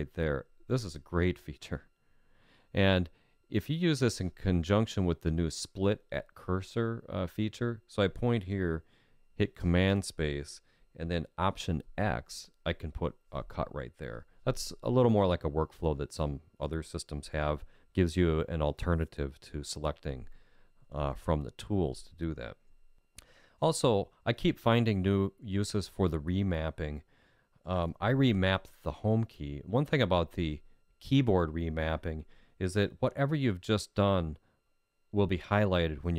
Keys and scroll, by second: 9.6 super+space.